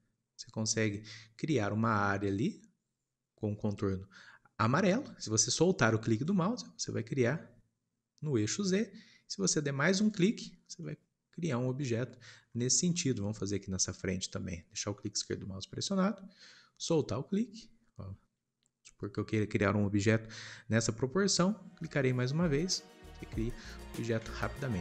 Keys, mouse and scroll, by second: 10.6 scroll down 1, 10.7-13.5 middle drag, 13.5 scroll up 2, 15.2 click, 22.4 scroll down 2, 22.7-24.8 middle drag.